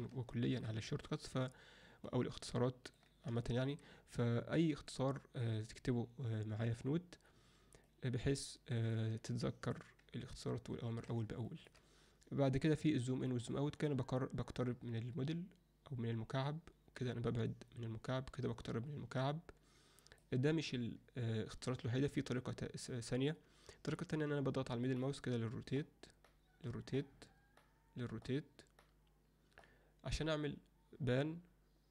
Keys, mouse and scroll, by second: 0.3 alt+shift+middle drag, 0.9 alt+middle click, 2.1-3.0 ctrl+middle drag, 3.5 shift+middle click, 7.9-8.9 middle drag, 9.3-9.7 ctrl+alt+middle drag, 10.9 alt+a, 11.5 shift+middle click, 13.3-20.2 drag, 22.9-23.3 alt+middle drag, 25.0-25.8 middle drag, 26.3-27.0 middle drag, 27.6-28.3 middle drag, 28.8-29.6 middle drag.